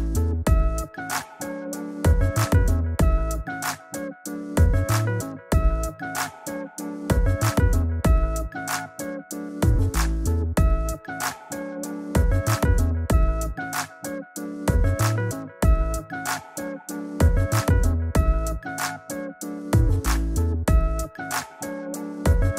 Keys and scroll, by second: 3.0 super+t, 3.6 alt+super+t, 19.0 shift+Up, 20.0 shift+Down, 20.7 shift+Up.